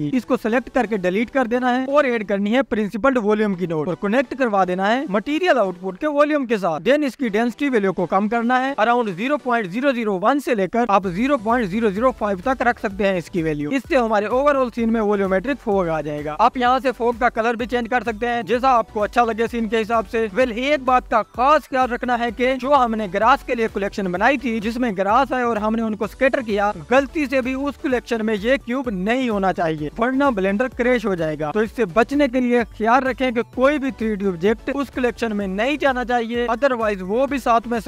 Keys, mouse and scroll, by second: 1.1 click, 1.6 Delete, 2.3-4.2 drag, 6.5 click, 9.7 KP_0, 10.7-12.1 scroll up 1, 12.4-13.1 scroll up 3, 13.1-14.2 drag, 14.2 KP_0, 15.2-15.8 scroll down 2, 15.8-16.2 scroll down 1, 18.0 click, 30.1-30.8 scroll up 3, 31.6-33.2 scroll down 1, 33.2 click, 34.3-34.8 scroll up 2, 35.0-35.4 scroll up 2, 35.4-35.9 drag, 36.9 scroll down 2.